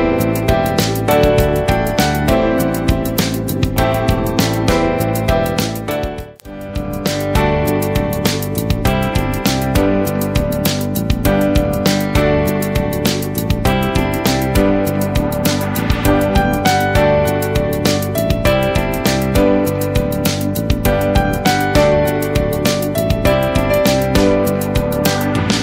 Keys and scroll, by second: 13.2 ctrl+Return, 18.4 ctrl+x, 20.7 ctrl+Return, 23.2 ctrl+v.